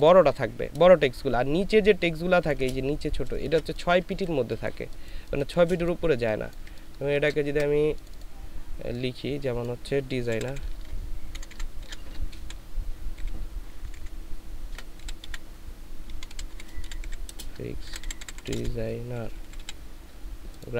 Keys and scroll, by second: 1.8 ctrl+space, 3.3 ctrl+space, 4.7 ctrl+space, 10.3 shift+d, 10.5 shift+e, 11.3 shift+BackSpace, 13.1 shift+s, 13.7 BackSpace, 13.9 BackSpace, 16.1-19.6 typing.